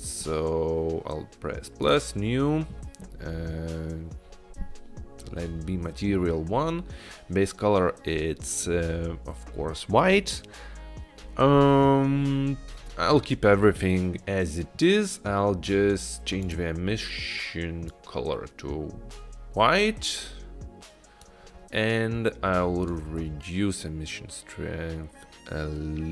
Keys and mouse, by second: 0.3 click, 1.9-2.3 drag, 16.5 click, 22.9-26.1 drag.